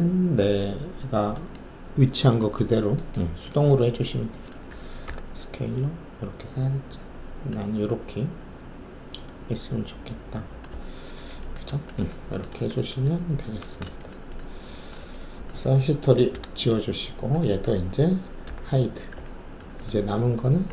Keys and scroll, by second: 5.0 r, 7.5 w, 11.6 alt+`, 12.7 alt+shift+a, 13.6 alt+shift+a, 16.3 alt+d, 18.4 h.